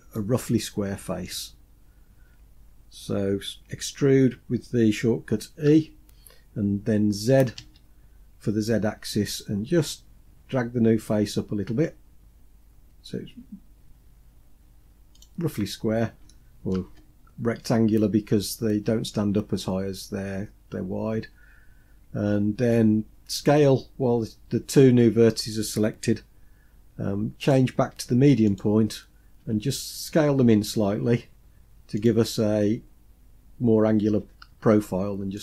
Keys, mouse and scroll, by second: 1.9-2.9 scroll up 4, 5.4 e, 15.6 scroll up 1, 16.0 shift+middle click, 27.1-28.3 drag, 29.1 s, 35.1 click.